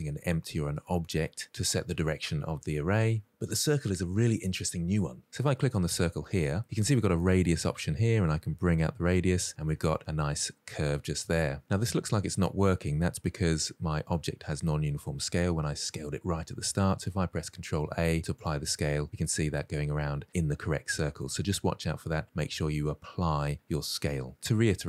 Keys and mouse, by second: 7.1-8.5 drag, 8.8-10.1 middle drag, 11.3 shift+middle drag, 11.5 middle drag, 17.5 ctrl+a, 19.2 middle drag.